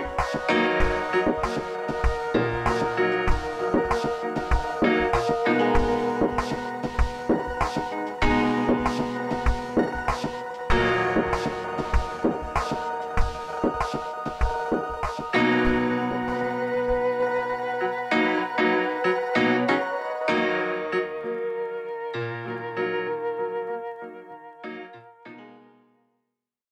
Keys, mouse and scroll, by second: 2.6-3.4 drag, 6.2 ctrl+z, 8.1-9.1 drag, 21.9 v, 22.1 click, 25.9 click.